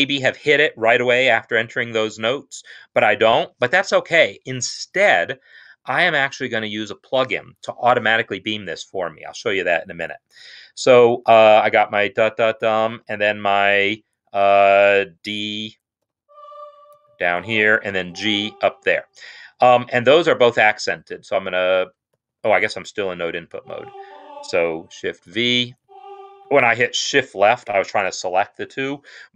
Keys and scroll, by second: 12.7 5, 16.0 d, 16.9 ctrl+Down, 17.7 g, 21.0 shift+Left, 22.0 shift+Right, 23.4 Left, 23.8 Left, 25.2 shift+v, 25.5 Right.